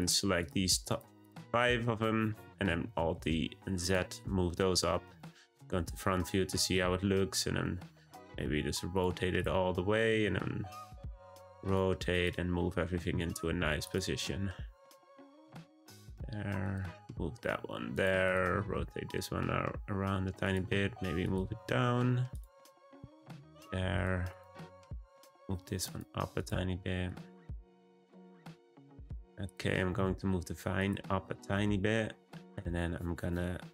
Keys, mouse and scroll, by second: 0.0 shift+click, 0.4 shift+click, 0.9 shift+click, 1.2 shift+drag, 2.7 alt+d, 4.1 `, 6.4 r, 9.3 click, 10.0 r, 12.1 click, 13.1 g, 14.8 r, 16.6 click, 17.1 g, 18.2 click, 18.4 r, 20.6 g, 21.4 r, 22.8 click, 23.0 g, 23.9 click, 24.2 click, 24.6 g, 26.4 click, 27.0 click, 28.0 g, 29.0 middle click, 29.4 click, 29.9 g, 31.1-31.5 scroll down 1, 31.5-33.7 middle drag.